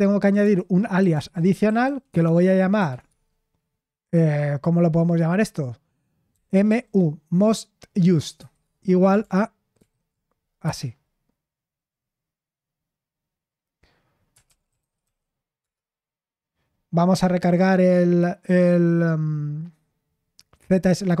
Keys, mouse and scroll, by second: 0.0-3.0 typing, 6.3-6.6 typing, 8.3 typing, 9.7 ctrl+v, 10.8 Escape, 14.4-15.5 typing, 15.5 Return.